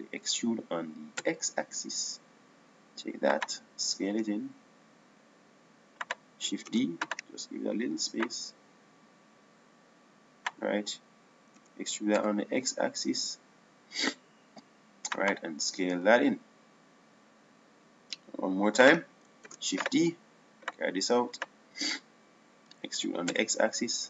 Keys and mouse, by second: 2.1 e, 5.9 s, 8.6 shift+d, 13.4 e, 17.7 s, 21.4 shift+d, 22.5-24.0 drag.